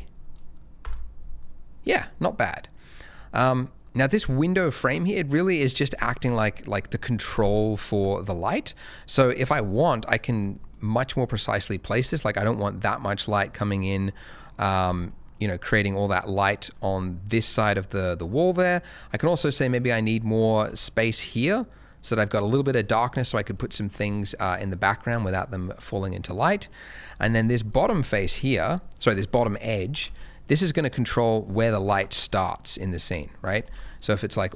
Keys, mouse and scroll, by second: 0.8 0, 2.1 scroll down 1, 2.9 middle click, 3.1 scroll down 1, 3.8 middle click, 4.5 scroll down 1, 4.8-7.8 scroll up 1, 7.9 Tab, 8.8 click, 9.5 2, 10.3 click, 10.5-11.3 scroll down 1, 11.3-11.6 scroll up 1, 11.9 g, 12.1 middle click, 13.6 click, 13.8 middle click, 14.8 g, 14.9 middle click, 16.6 click, 17.6 middle click, 18.9 click, 20.1 middle click, 20.6 g, 20.7 middle click, 21.9 click, 23.2 middle click, 26.8 click, 27.8 KP_0, 29.2 shift+middle click, 29.3 shift+scroll up 1, 29.9 g, 30.0 z, 31.3 click, 31.8 shift+middle click, 32.4 scroll up 1, 33.1 shift+middle click, 33.6 g, 33.7 z.